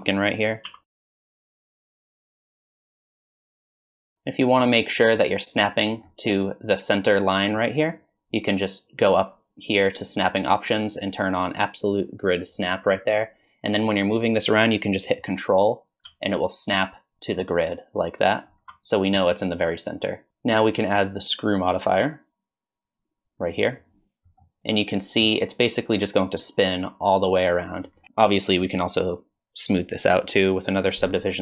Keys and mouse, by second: 0.7-3.8 typing, 10.6-12.6 drag, 13.7-18.4 drag, 19.4 click, 20.3 Tab, 21.6-23.9 drag, 24.4-25.2 middle drag.